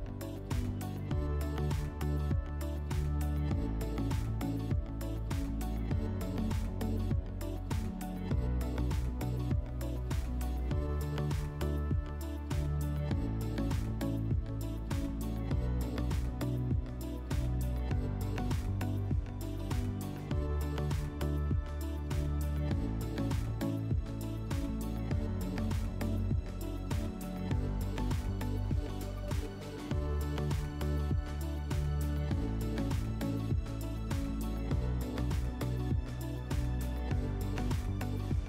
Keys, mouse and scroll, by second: 2.0 click, 5.9 right click, 7.1 click, 8.0 click, 10.2 click, 13.6 click, 15.1 alt+middle click, 17.4 click, 17.8 r, 19.9 click, 22.5 ctrl+z, 22.8 ctrl+z, 24.8 click, 26.5 click, 27.7 click, 29.4 w, 33.3 click, 34.3 r, 37.2 click.